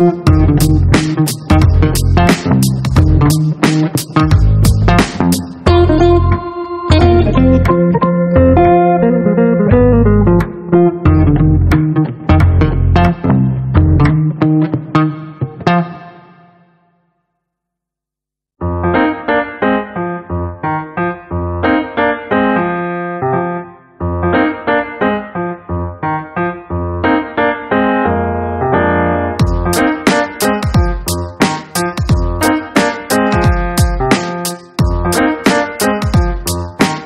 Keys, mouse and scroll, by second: 0.3 click, 1.8 click, 3.2 click, 4.2 click, 4.8 click, 5.7 click, 7.5 click, 8.6 click, 12.5 click, 13.5 click, 13.8 right click, 15.0 click, 26.7 click, 28.2 click, 29.6 click, 31.0 click, 32.6 click, 35.1 click, 36.3 click.